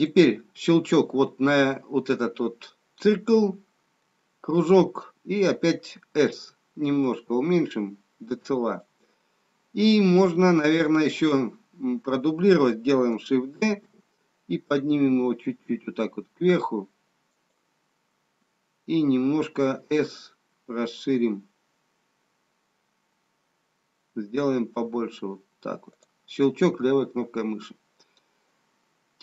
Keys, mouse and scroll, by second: 0.0 click, 6.3 s, 13.7 shift+d, 19.7 s.